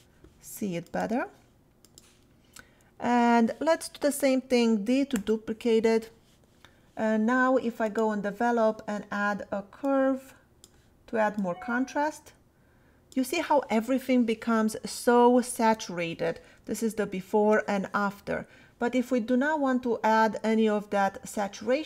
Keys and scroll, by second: 5.1 d, 16.6 \.